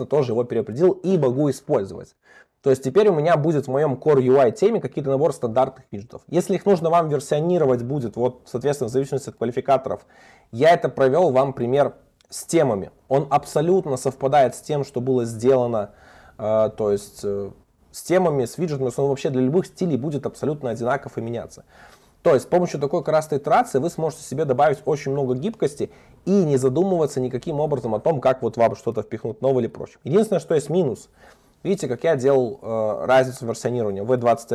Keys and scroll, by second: 0.0 super+s, 3.0 super+1, 7.8 super+1, 23.8 super+1, 32.4 super+1.